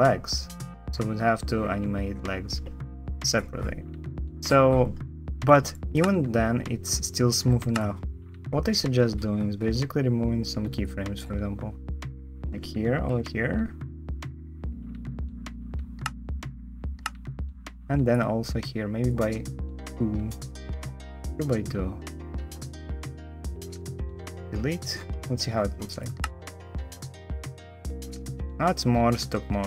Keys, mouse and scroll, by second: 5.7 space, 5.9 space, 7.5 space, 12.9 shift+Delete, 15.7 shift+space, 16.8 space, 16.8 space, 24.1 shift+Delete, 25.9 space.